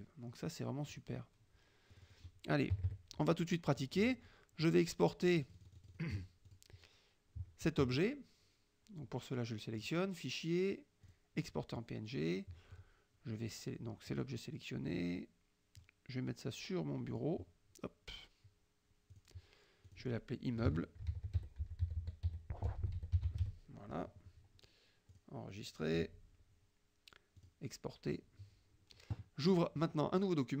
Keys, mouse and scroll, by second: 1.0 click, 2.0 click, 2.8 KP_Subtract, 3.7 middle click, 4.7-6.2 drag, 6.5 click, 9.9 click, 11.1 click, 14.2 click, 15.9 click, 17.2 click, 19.2 click, 19.9 click, 20.7-24.0 typing, 25.2 click, 27.5 click.